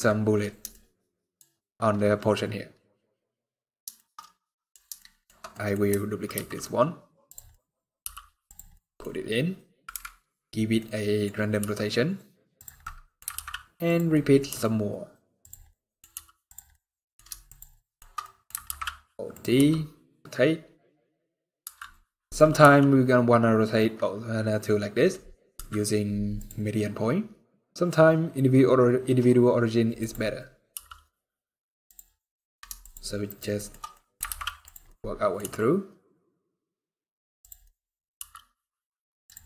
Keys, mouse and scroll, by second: 0.3 scroll up 2, 0.3 scroll down 1, 0.4 shift+middle click, 1.2 shift+scroll up 1, 2.3-3.3 scroll down 4, 3.6 shift+middle click, 3.9 middle click, 4.6 shift+middle click, 5.2 middle click, 6.0 alt+d, 7.2 middle click, 7.7 g, 8.4 middle click, 8.8-9.5 scroll up 2, 9.6 KP_Decimal, 10.5 middle click, 10.9 scroll down 1, 11.3 r, 12.5 middle click, 13.0 alt+d, 13.8 middle click, 14.2 r, 15.4 middle click, 15.8 r, 16.4 middle click, 17.2 shift+click, 17.5 shift+middle click, 17.9 middle click, 18.4 alt+d, 19.2 r, 21.8 middle click, 22.3 r, 26.1 click, 31.9 middle click, 32.5 shift+click, 33.2 shift+middle click, 33.6 middle click, 34.0 alt+d, 34.5 middle click, 35.1 r, 37.3 middle click, 37.8 r, 39.2 middle click.